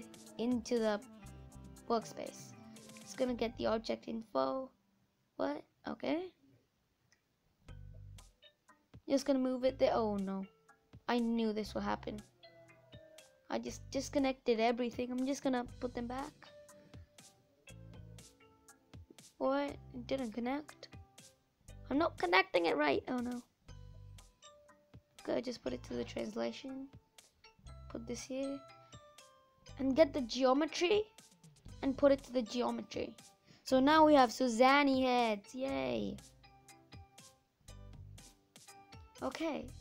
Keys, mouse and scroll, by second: 9.3 click, 11.0 click, 15.8 click, 17.9 click, 21.3 click, 25.1 click, 31.8 click, 32.5-33.0 scroll down 5, 33.4-35.1 scroll down 2, 35.1 click, 35.5-36.6 scroll up 5.